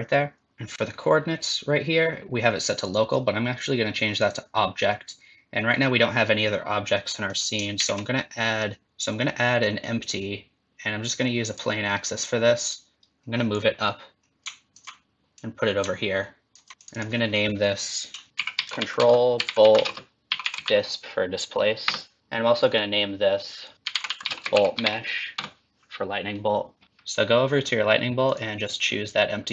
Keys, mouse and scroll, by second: 2.8 click, 7.1 middle click, 7.7 shift+a, 13.6 click, 15.3 click, 16.8 click, 16.9 click, 18.3 BackSpace, 22.7 click, 23.4 click, 23.5 click, 28.2 click.